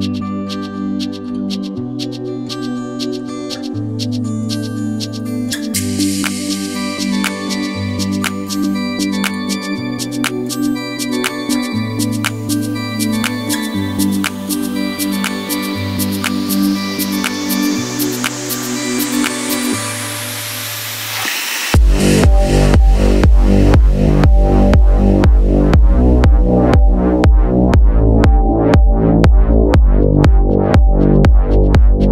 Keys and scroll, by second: 3.4 Right, 5.2 Right, 5.7 Right, 6.4 super+s, 30.4 Down, 30.6 Up, 32.0 2.